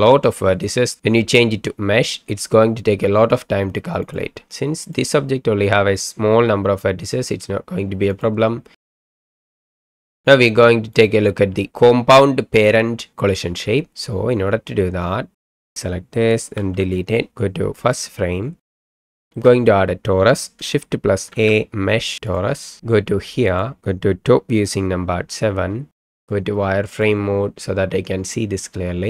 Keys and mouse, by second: 4.0 click, 4.8 click, 8.7 space, 10.1 space, 11.1-13.6 drag, 16.8 Delete, 17.9 click, 18.7 middle drag, 19.2 shift+middle drag, 21.3 shift+a, 23.5 click, 24.6 KP_7.